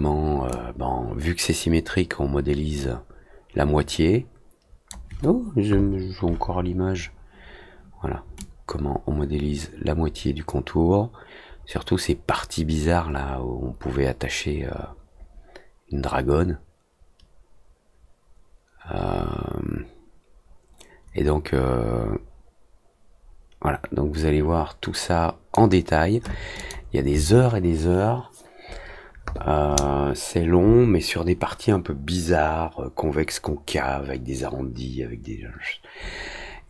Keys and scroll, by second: 4.9 z, 12.2 F3, 13.0 F3, 19.5 alt+w, 21.0 alt+w, 21.7 alt+w, 24.6 alt+w.